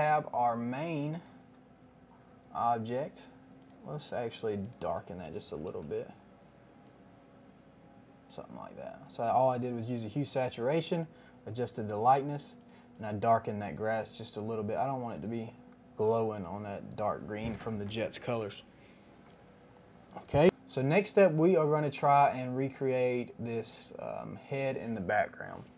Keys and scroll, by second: 5.6 ctrl+alt+g.